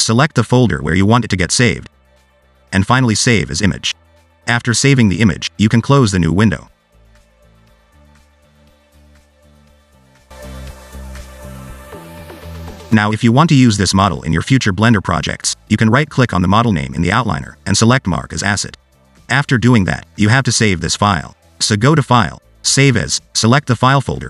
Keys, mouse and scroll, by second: 8.6 scroll down 2, 8.8 middle click, 9.2 scroll down 1, 9.3 middle click, 9.6-10.4 scroll up 1, 10.4 click, 12.8 click, 12.9 middle click, 13.1 scroll up 1, 13.3 middle click, 17.3 right click, 21.5 click.